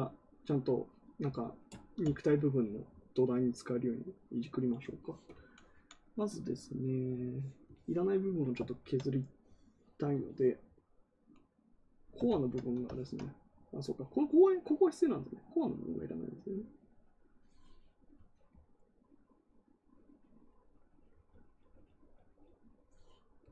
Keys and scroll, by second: 12.2 ctrl+z.